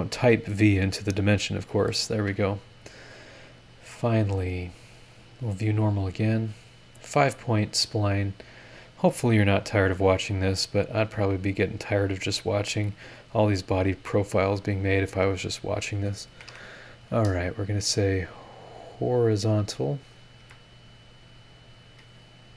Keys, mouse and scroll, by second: 0.6 click, 1.6 click, 2.1 Escape, 2.4 scroll up 1, 2.5-3.4 scroll down 3, 6.4 click, 8.6 click, 9.0-9.8 scroll up 4, 11.7 click, 12.8 click, 14.1 click, 14.4 middle click, 14.7 click, 15.0 middle click, 15.6 click, 16.3 Escape, 17.4 click, 17.7 middle click, 18.4 click, 18.7 middle click, 18.8 click, 19.8 click, 20.4 h.